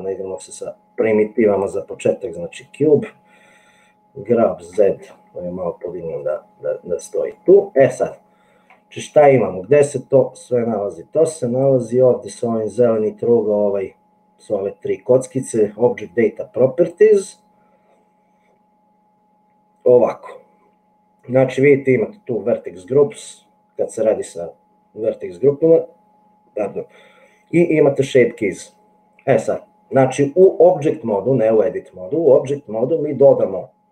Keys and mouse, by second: 4.7 g, 7.4-8.8 middle drag.